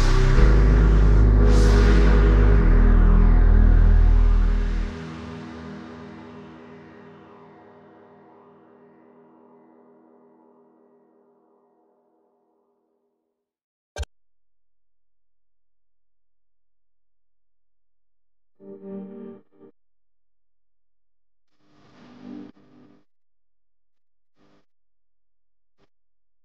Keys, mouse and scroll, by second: 2.1 ctrl+click, 6.4 double click, 6.8-8.2 typing, 8.3 Return, 16.2-17.9 typing, 22.8 ctrl+t, 24.2 alt+shift+click.